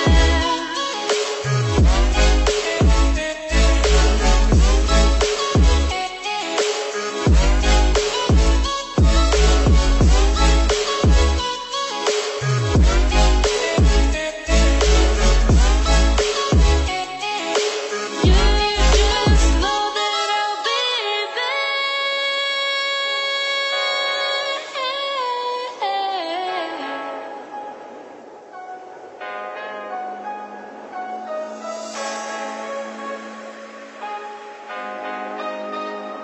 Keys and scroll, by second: 1.4 ctrl+0, 13.9 ctrl+z, 31.3 ctrl+=.